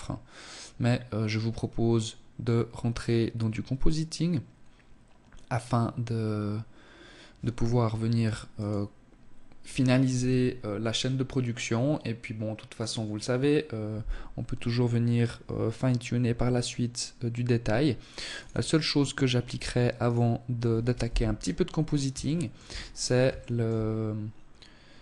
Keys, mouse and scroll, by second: 17.6 click, 18.4-19.0 scroll up 1, 19.0 right click, 19.0-19.9 scroll up 1, 19.9 KP_1, 20.8 scroll up 2, 21.1 shift+middle click, 21.6-22.2 scroll up 2, 22.2 shift+middle click, 22.7-24.2 scroll up 1, 24.2 scroll up 1, 24.8 click.